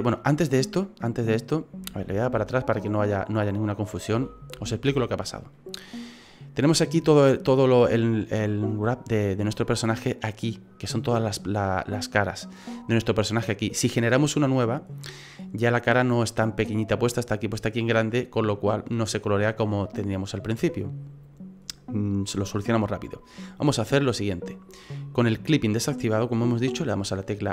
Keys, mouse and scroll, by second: 0.3 right click, 2.1 ctrl+z, 2.4 ctrl+z, 4.1 ctrl+z, 4.6 ctrl+z, 4.9 ctrl+z, 5.5 middle click, 8.2-9.1 scroll down 4, 22.8 middle click, 23.3-24.5 scroll up 3, 25.8-26.4 scroll up 1.